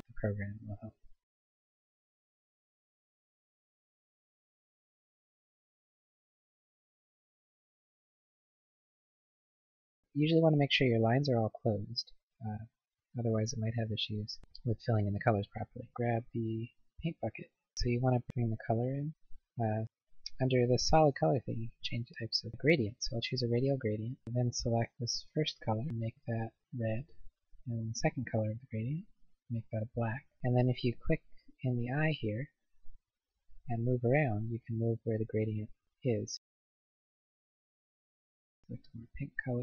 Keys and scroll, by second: 8.9 ctrl+z.